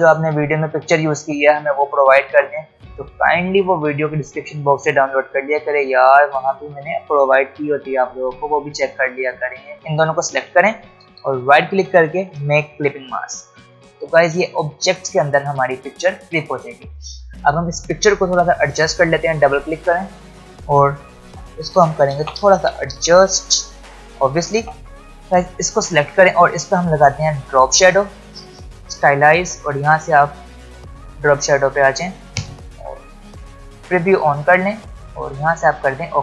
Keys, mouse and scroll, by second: 11.2 right click, 12.5 click, 18.7 click, 21.2 shift+Left, 21.7 shift+Down, 22.1 shift+Left, 22.6 shift+Down, 23.5 shift+Left, 24.5 shift+Right, 24.9 click, 33.8 click.